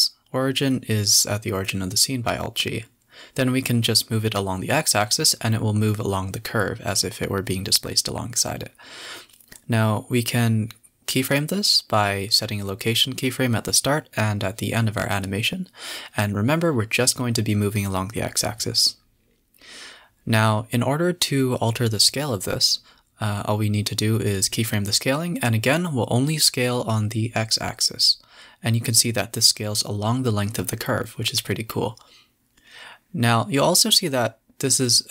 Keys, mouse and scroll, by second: 0.3 s, 1.3 g, 5.8 alt+s, 6.5 s, 10.4 click, 11.0 KP_0, 12.0 click, 12.6 g, 16.0-17.8 drag, 17.8 s, 19.2-21.3 drag, 23.8-25.8 drag, 26.4 u, 26.9 i, 27.9-28.8 drag, 28.8 s, 33.1-33.7 drag, 33.7 space, 33.9 scroll up 2, 34.0 a, 34.1 a, 34.3 z.